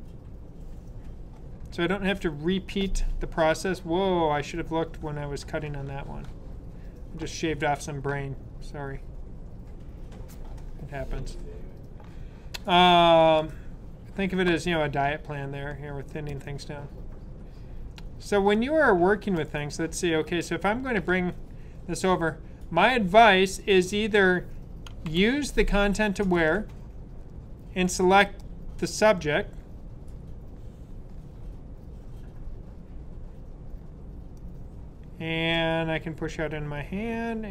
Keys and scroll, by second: 25.0 super+d.